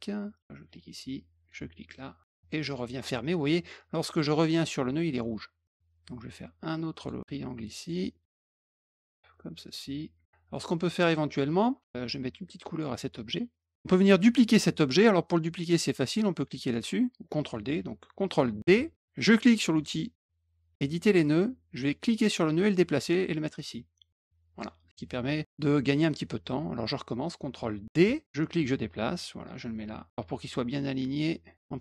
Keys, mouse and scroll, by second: 1.4 click, 2.3 click, 5.2 middle click, 6.9 click, 7.7 click, 8.3 click, 9.6 click, 11.0 click, 12.7 click, 18.7 ctrl+d, 20.7 click, 22.3-24.5 drag, 28.0 ctrl+d, 28.2-31.8 drag.